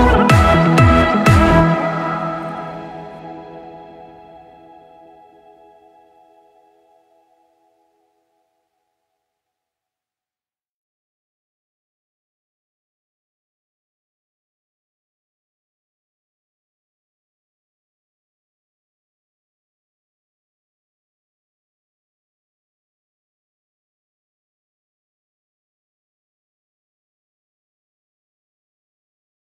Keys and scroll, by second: 0.9 Left, 3.7 2, 3.8 Return, 6.1 Escape, 6.8 ctrl+z, 8.3-9.5 typing, 9.7 Return, 11.5 Left, 12.2 Right, 18.9-21.0 typing, 23.0 Left.